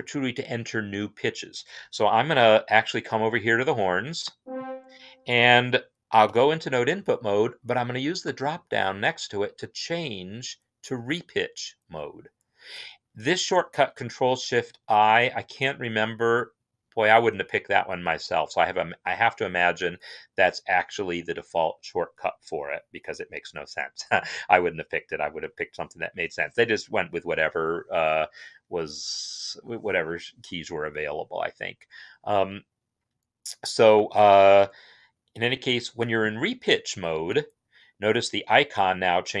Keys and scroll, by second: 6.2 n.